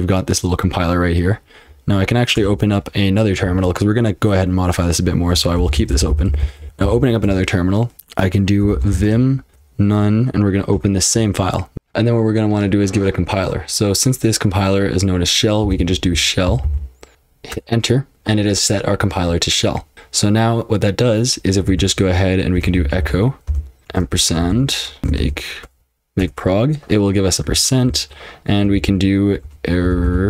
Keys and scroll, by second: 2.3 super+Return, 5.6 alt+k, 5.7 alt+k, 5.9 alt+k, 6.1 alt+k, 6.2 alt+k, 6.4 alt+k, 6.6 alt+k, 6.8 alt+k, 8.4-9.4 typing, 9.5 ctrl+f, 10.7 Return, 11.5-12.2 typing, 15.4-17.1 typing, 17.5 Return, 21.7-28.0 typing, 28.7 ctrl+w, 29.2-30.2 typing.